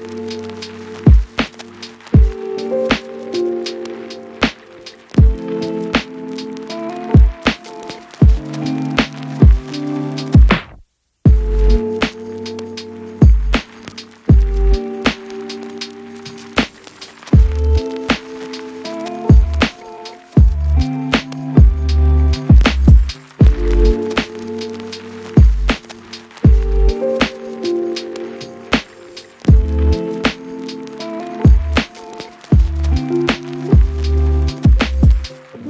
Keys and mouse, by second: 0.1 click, 0.1 middle click, 0.1 right click, 0.8-1.9 shift+drag, 0.8-1.9 shift+middle drag, 0.8-1.9 shift+right drag, 2.1 click, 2.1 middle click, 2.1 right click, 2.3 ctrl+a, 3.6 click, 4.2 u, 6.8 u, 8.2 click, 9.2 middle click, 10.7 middle click, 11.7-13.3 middle drag, 12.9 Tab, 13.6 middle click, 14.0 j, 14.3 shift+click, 14.6 shift+click, 14.8 j, 15.0 Tab, 15.0 ctrl+x, 15.0 ctrl+click, 15.2 ctrl+x, 16.0 ctrl+click, 16.1 ctrl+r, 16.6 ctrl+click, 16.8 ctrl+z, 17.0 Tab, 17.5 shift+click, 17.8 Tab, 18.7 Tab, 19.1 j, 19.8 j, 20.4 Tab, 20.6 click, 20.6-22.6 middle drag, 20.6 right click, 22.8 Tab, 23.6 middle click, 24.0 shift+click, 24.3 shift+click, 24.9 j, 25.5 ctrl+click, 25.6 ctrl+r, 25.6-27.8 shift+middle drag, 26.1 j, 26.3 Tab, 27.8 click, 28.6 click, 29.6 click, 30.3 KP_Divide, 30.4 a, 30.6 middle click, 31.0 KP_1, 31.6 ctrl+1, 31.8 ctrl+z, 31.9 ctrl+2, 32.0 KP_1, 32.4 shift+d, 32.7 shift+click, 33.1 shift+click, 33.2 shift+d, 33.3 shift+click, 33.8 shift+click, 34.1 shift+click, 34.2 shift+d, 34.3 shift+middle click, 35.5 ctrl+z, 35.5 shift+middle click, 35.6 shift+d.